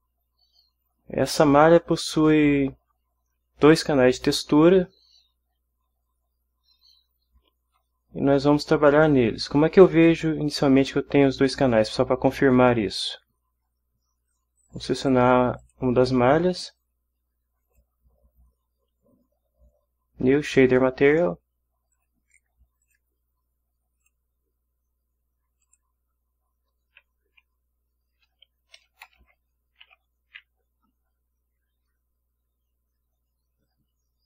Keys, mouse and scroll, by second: 15.0 click, 15.6 click, 17.6 click, 19.7 click, 21.9 click, 22.8 click, 24.0 click, 25.6 click, 28.2-29.8 typing, 31.6 1.